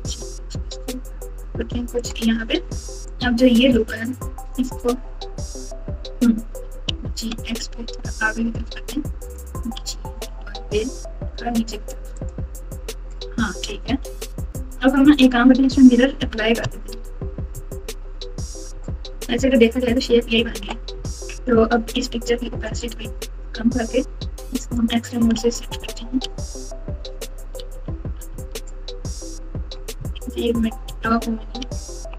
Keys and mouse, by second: 3.0 click, 3.2-6.2 drag, 6.6 g, 9.7 g, 12.7 Tab, 13.8 KP_7, 14.9 Tab, 15.5 Tab, 16.8 ctrl+a, 18.7 Tab, 19.0 Tab, 21.3 click, 24.6 click, 25.3 alt+z, 26.3 alt+z, 28.3 alt+z, 30.8-32.1 typing.